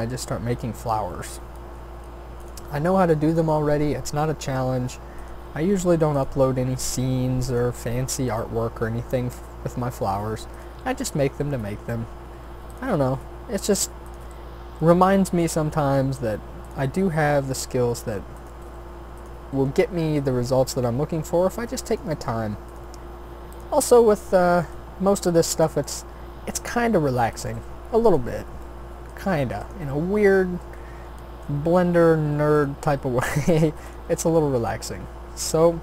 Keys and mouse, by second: 1.6 shift+d, 2.6 r, 3.7 e, 5.4 s, 6.4 e, 7.7 s, 8.5 e, 10.8 s, 13.1 e, 15.4 s, 17.1 e, 18.6 r, 19.5 g, 20.3 s, 22.1 g, 23.0 e, 25.8 ctrl+z, 26.9 s, 27.5 g, 31.3 shift+d, 32.9 r, 34.1 e.